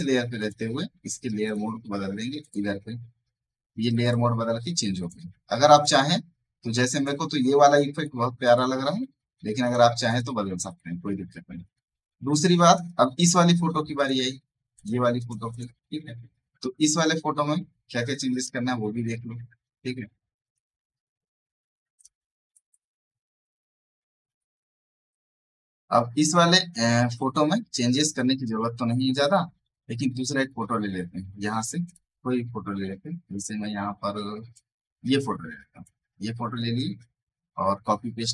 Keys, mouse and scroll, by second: 0.3 click, 3.6 space, 3.7 right click, 3.9 click, 4.4 alt+scroll down 1, 9.8 click, 10.2 space, 10.4 right click, 10.6 click, 11.5 right click, 12.6 click, 12.8 right click, 13.1 click, 18.0 click, 18.0 click, 21.9 click, 25.9 click, 26.6 ctrl+z, 27.2 click, 27.9 ctrl+z, 29.1 click, 34.4 click, 35.3 alt+Tab.